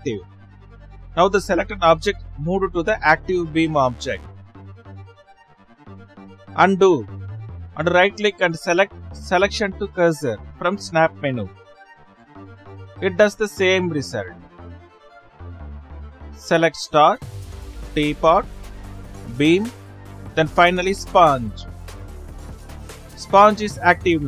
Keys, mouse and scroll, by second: 4.2-5.3 right drag, 5.6-7.2 right drag, 7.2 ctrl+z, 7.4-8.7 right drag, 15.3 ctrl+z, 16.7 Left, 18.2 shift+click, 21.3 shift+click.